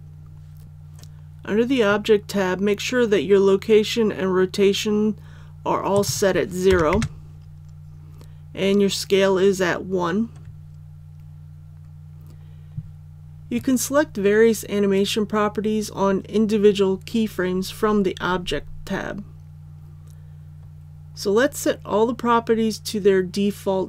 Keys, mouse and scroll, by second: 6.7 KP_0.